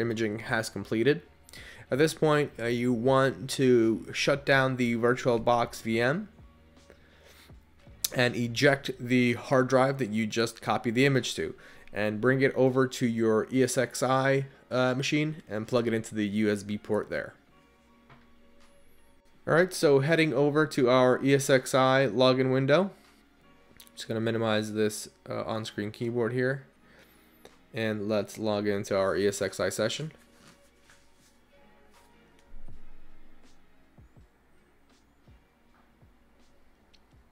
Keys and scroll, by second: 7.5 Return, 12.6 Up, 12.9 Up, 15.7 Return.